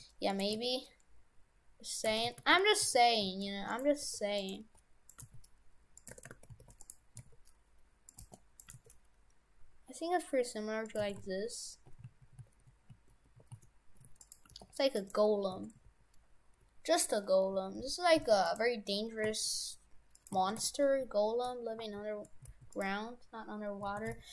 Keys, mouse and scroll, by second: 0.5 s, 2.1 shift+f, 4.0-7.1 typing, 8.2 g, 8.7 g, 11.1 shift+f, 14.5 g, 15.6 shift+f, 19.3 s, 20.5 shift+f, 23.9 shift+f.